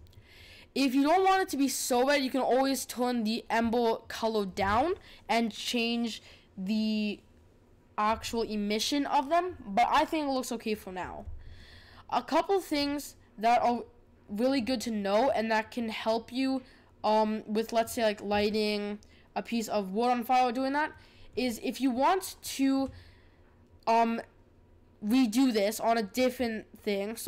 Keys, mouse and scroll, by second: 11.1-12.8 middle drag, 12.8 click, 13.5-18.3 middle drag, 21.0-27.2 middle drag.